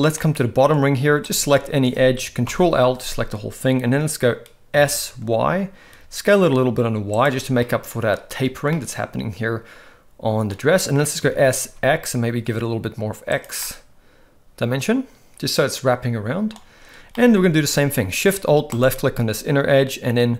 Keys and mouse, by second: 0.2 middle click, 2.5 ctrl+l, 4.7 s, 7.6 middle click, 8.7-10.5 middle drag, 11.2 s, 13.6-16.5 middle drag, 17.1 middle click, 17.5 alt+a, 18.7 alt+shift+click.